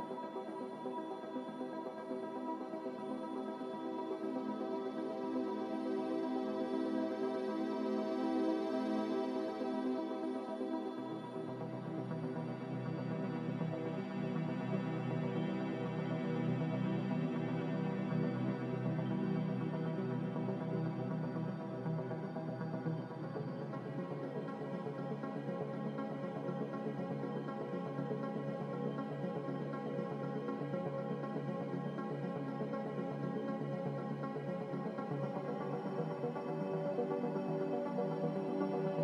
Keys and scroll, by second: 7.5 a, 25.4 g.